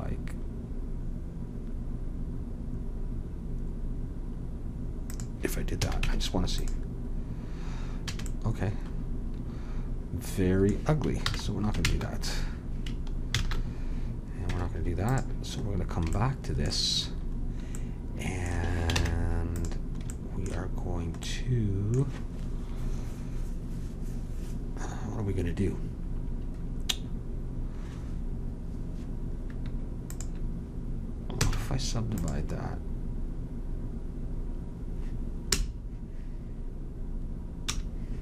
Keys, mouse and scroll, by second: 5.8 a, 6.0 Tab, 8.1 a, 11.2 ctrl+z, 11.8 ctrl+z, 13.3 ctrl+z, 14.5 Tab, 19.0 ctrl+Tab, 30.1-31.4 drag, 31.4 w, 35.5 i.